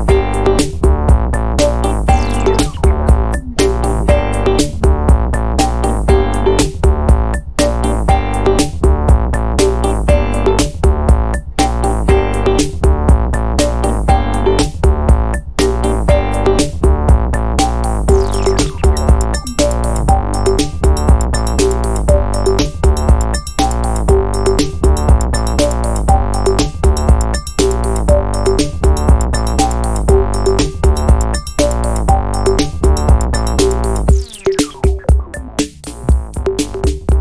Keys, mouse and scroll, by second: 0.0 click, 1.2-2.1 typing, 4.1 click, 5.0-5.9 typing, 6.4 click, 7.1-7.5 scroll down 2, 8.4 click, 10.2-13.3 drag, 13.8-15.0 drag, 15.6 click, 16.1 click, 22.6 click, 23.4 click, 24.3 click, 25.3-26.2 typing, 27.1 click, 28.0-29.0 typing, 29.5-29.9 scroll down 1, 31.9 click, 32.4-33.4 typing, 34.2 click, 35.1 scroll down 2, 35.5-35.8 scroll up 2, 36.8 click.